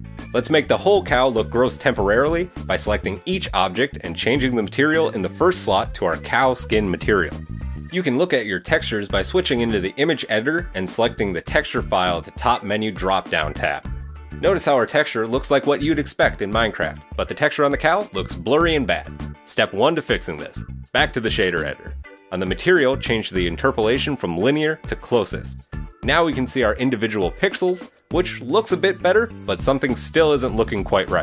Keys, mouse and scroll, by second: 0.5-0.8 scroll up 1, 1.2 right click, 2.9 click, 4.4 right click, 5.3 click, 6.6 right click, 7.4-8.3 scroll up 2, 10.9 click, 13.1 click, 14.6-15.4 scroll up 13, 15.4-16.2 scroll down 1, 16.2-16.7 scroll down 1, 16.7 middle click, 21.3 click, 22.6-23.3 scroll up 2, 23.3 scroll up 1, 23.5 click, 27.3 middle click, 29.3 click.